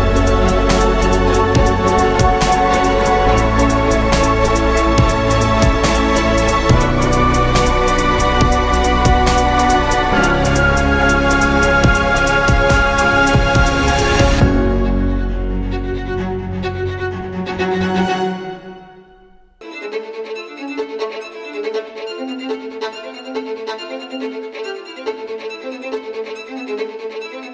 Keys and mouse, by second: 0.0 z, 3.7 z, 4.7 Tab, 5.2 a, 7.7 middle click, 8.4 s, 10.1 Tab, 11.3 Tab, 14.0 right click, 14.4 ctrl+Tab, 16.2 right click, 16.2 i, 24.1 ctrl+b, 27.0 Tab.